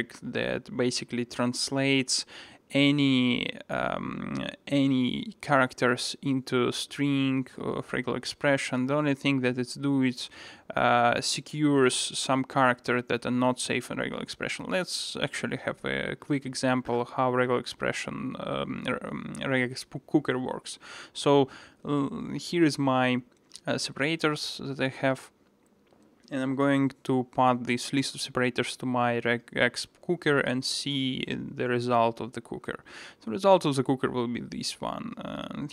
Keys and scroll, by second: 1.9 super+b, 32.3 ctrl+shift+r.